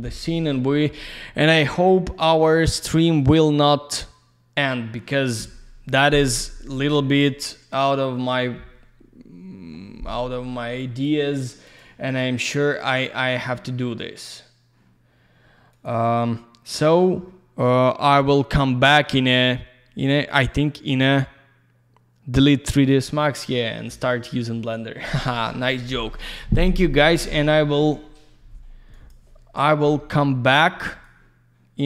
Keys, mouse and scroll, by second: 10.8 click, 11.7 click, 11.8 click, 12.1 click, 12.2 double click, 12.9 click, 13.0 click, 15.7 click, 15.9 click, 28.9 click, 29.1 click, 30.5 click.